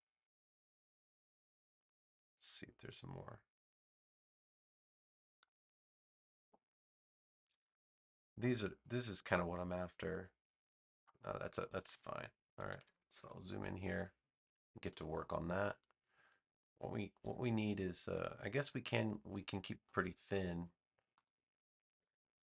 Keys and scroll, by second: 12.6 super+=, 17.1 v, 21.9 BackSpace.